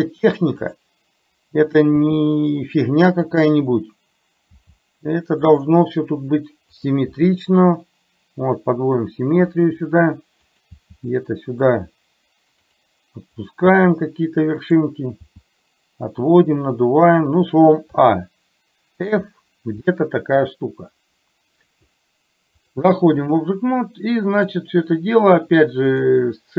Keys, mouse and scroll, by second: 4.6 g, 6.9 click, 10.7 click, 10.8 g, 13.8 g, 17.9 a, 19.1 f, 22.7 click, 24.4 click, 25.9-26.5 drag.